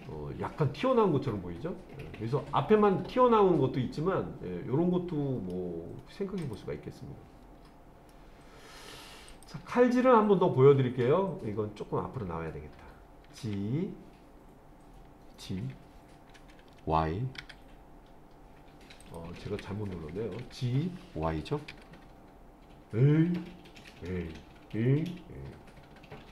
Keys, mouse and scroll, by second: 6.4 click, 7.5-8.1 scroll down 1, 8.1-8.8 middle drag, 9.3 click, 13.4 g, 15.5 g, 17.4 y, 19.0 click, 19.4 ctrl+z, 20.4 g, 21.7 y.